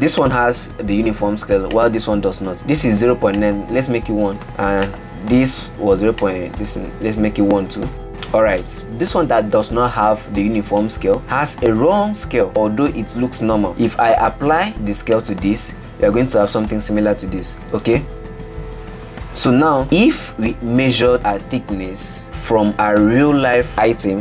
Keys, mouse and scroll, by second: 0.2-0.7 shift+middle drag, 0.7-1.2 scroll down 2, 1.2 click, 1.9 click, 3.6-5.1 drag, 6.4-7.9 drag, 8.0-8.8 scroll down 5, 8.8 click, 11.2-11.9 middle drag, 11.9 scroll up 5, 12.5-14.6 middle drag, 14.6 ctrl+a, 16.3-17.5 scroll down 5, 17.5 ctrl+z, 17.9 click, 18.0 ctrl+z, 18.3 ctrl+z, 18.6 ctrl+z, 19.7-22.5 shift+middle drag.